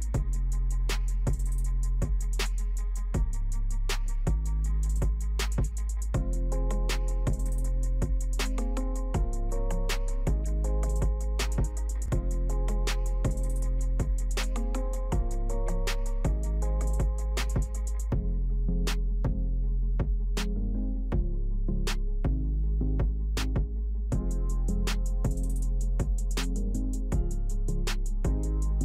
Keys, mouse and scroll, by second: 9.5-28.8 drag.